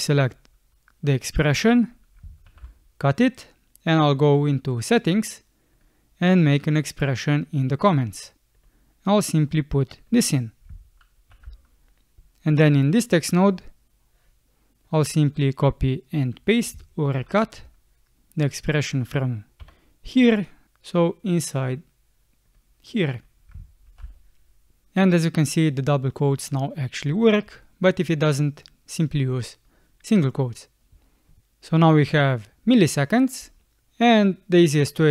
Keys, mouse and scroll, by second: 2.4 ctrl+x, 11.3 ctrl+v, 17.0 ctrl+x, 19.6 BackSpace, 23.9 ctrl+v, 31.4 space, 33.4 space.